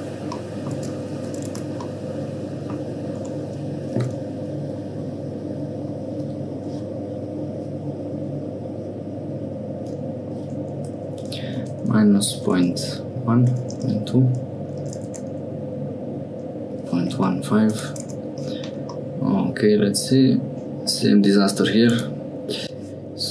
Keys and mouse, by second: 0.3 click, 0.7 Tab, 1.4 Tab, 1.8 middle click, 2.1 click, 3.2 Tab, 4.2 e, 18.0 Tab, 18.9-21.8 middle drag, 21.9 Tab.